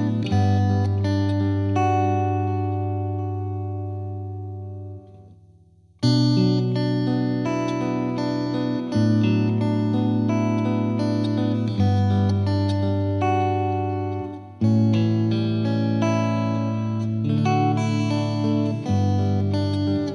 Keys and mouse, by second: 0.4 click, 2.4 right click, 2.5 click, 4.3 click, 6.2 click, 8.1 F2, 9.1 click, 12.1 click, 14.5 click, 15.5 click, 16.4 click, 17.9 click, 18.7 click, 20.0 click.